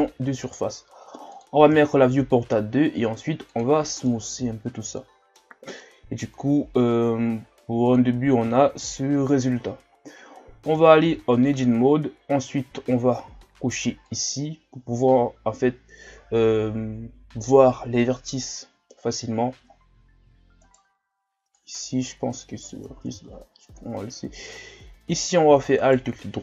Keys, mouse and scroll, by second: 1.9 shift+scroll down 4, 2.8 w, 4.0-7.1 middle drag, 7.9-8.9 drag, 8.9 KP_1, 9.9-10.7 scroll up 2, 10.7 Tab, 11.2 shift+scroll down 1, 13.1-14.0 shift+scroll down 2, 14.1-17.1 drag, 19.7-20.6 scroll up 1, 20.6 right click, 21.6-23.0 drag, 23.0 ctrl+z, 24.6 scroll down 4, 25.0 scroll up 2, 25.8 alt+right click, 26.3-26.4 scroll down 2.